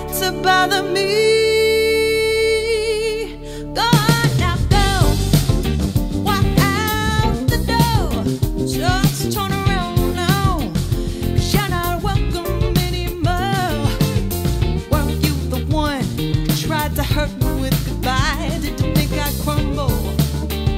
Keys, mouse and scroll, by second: 7.6-10.9 middle drag, 7.6-8.7 scroll, 10.9-20.7 drag.